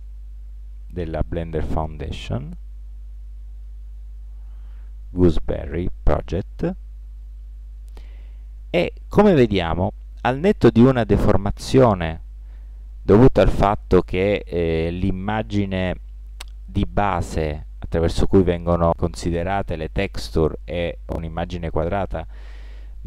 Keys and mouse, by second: 0.0 click, 0.6-1.1 drag, 1.7-5.3 middle drag.